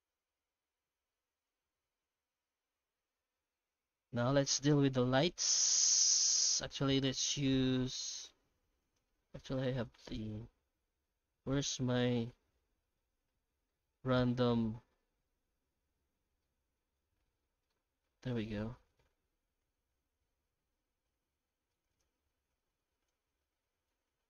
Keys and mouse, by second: 2.0 middle click, 3.1 middle click, 5.0 middle click, 5.9-7.3 middle drag, 8.8 click, 9.8 middle click, 11.0 middle click, 13.7-16.8 middle drag, 18.1 middle click, 19.8-22.1 drag, 23.2-24.2 drag.